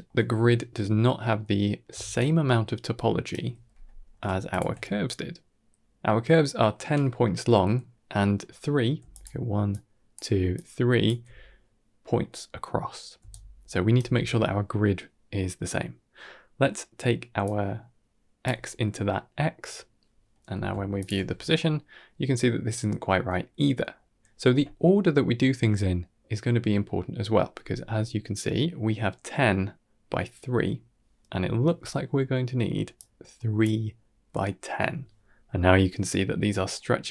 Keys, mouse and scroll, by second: 1.3-1.7 middle drag, 1.8 d, 2.0-3.2 right drag, 3.2 d, 3.2 d, 3.7 middle click, 4.4 alt+shift+click, 8.8-11.1 typing, 9.0 click, 9.6 click, 10.4 click, 13.1 d, 13.2 right click, 14.0 d, 15.3-16.1 middle drag, 17.3 drag, 18.9-19.5 middle drag, 20.2 middle click, 20.8 alt+shift+click, 21.5-21.8 middle drag, 26.5-27.0 middle drag, 27.0 ctrl+middle click, 27.5 middle click, 32.8-33.5 drag, 36.1-36.6 middle drag.